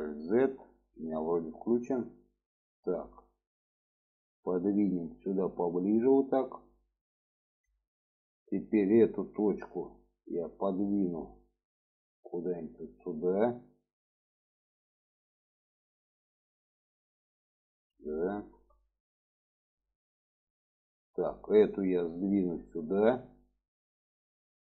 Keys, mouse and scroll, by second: 1.5 click, 3.9 click, 5.1-6.4 drag, 7.1 shift+middle click, 8.2-8.5 drag, 9.3-14.0 drag, 14.5-17.9 middle drag, 18.5 shift+middle drag, 19.4 shift+middle click, 20.4-20.7 shift+middle drag, 21.4 click, 22.5-24.0 drag, 24.4 shift+middle drag.